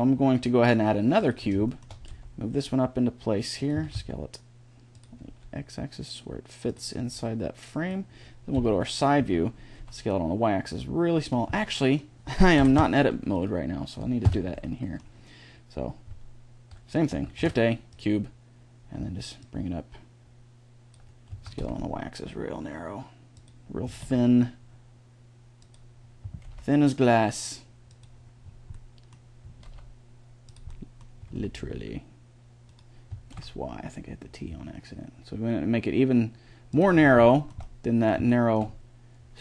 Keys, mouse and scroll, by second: 1.9 g, 3.5 s, 5.1 g, 6.8 s, 8.3 KP_3, 9.0 s, 12.4 Delete, 14.1 Tab, 17.2 shift+a, 19.2-21.0 drag, 21.1 s, 23.7 s, 26.1 s, 28.2-29.2 middle drag, 29.3 s, 31.0 s, 32.9 s, 36.8-39.4 middle drag.